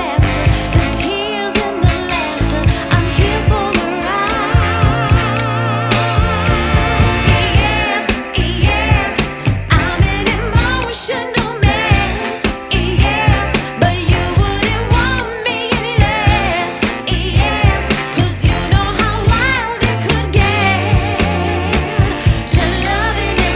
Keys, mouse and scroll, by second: 0.0 scroll down 2, 0.2 scroll up 1, 0.5 scroll down 1, 0.7-1.0 scroll up 1, 1.0 scroll down 1, 1.0 scroll up 1, 1.1-1.7 scroll down 2, 1.7-2.5 scroll down 2, 2.5 click, 5.0 ctrl+t, 7.4 click, 9.6 click, 14.0 F10, 15.5-16.0 scroll down 1, 16.0 scroll up 1, 16.1 scroll down 1, 17.3-17.9 scroll up 4, 17.9-18.4 scroll down 1, 18.4 scroll up 1, 18.6 scroll down 1, 18.8 scroll up 2, 18.9-19.4 scroll down 1, 19.6-20.9 scroll up 2, 20.9 click.